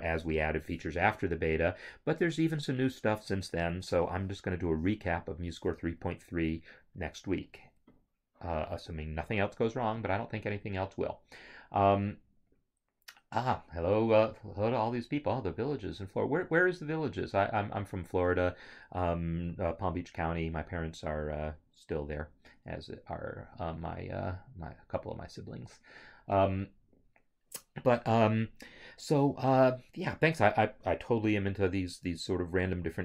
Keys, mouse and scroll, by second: 32.3 click.